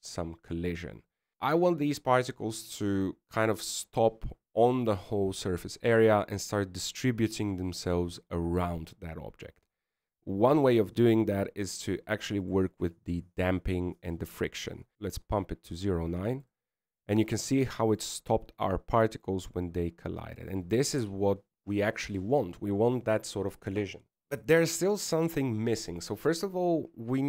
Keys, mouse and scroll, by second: 1.7-2.4 scroll down 7, 2.4-3.0 scroll down 3, 14.5 click, 15.6 click, 18.5 middle click, 19.6 scroll up 1, 19.7 middle click, 21.3 middle click, 23.1 KP_1.